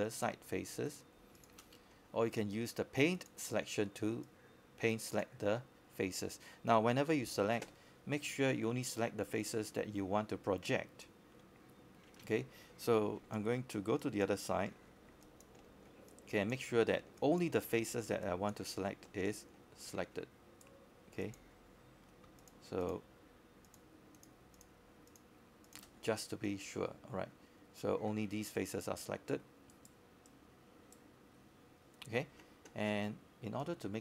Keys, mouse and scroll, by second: 1.6 alt+space, 1.6 click, 2.5 alt+click, 3.6-5.5 drag, 5.5 scroll up 1, 5.8 alt+middle click, 10.4-11.9 right drag, 13.4 click, 14.8 shift+click, 15.7 shift+click, 16.1 shift+click, 16.4 shift+click, 17.6 shift+click, 19.5-27.9 drag, 28.6 q, 29.7 scroll down 1, 30.5 alt+click, 31.0 alt+middle click, 31.4 scroll up 1, 31.8 alt+click, 32.6 alt+click, 33.5 alt+scroll down 1, 33.7 alt+click.